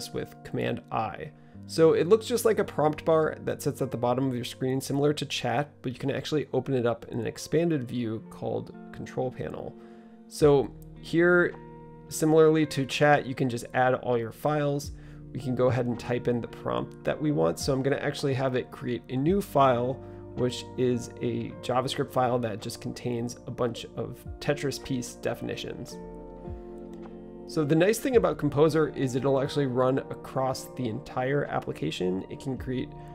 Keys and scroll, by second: 22.9-31.2 typing.